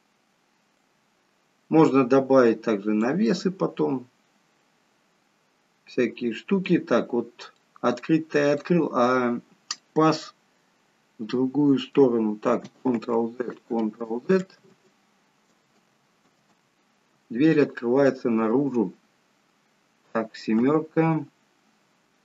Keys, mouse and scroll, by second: 0.7 click, 3.2 middle click, 7.0-8.1 scroll up 4, 7.5 middle click, 8.1-9.6 scroll down 3, 8.5 middle click, 9.6 middle click, 13.2 ctrl+z, 13.7 ctrl+z, 14.6 ctrl+z, 15.7 ctrl+z, 16.4 ctrl+z, 20.4 KP_7.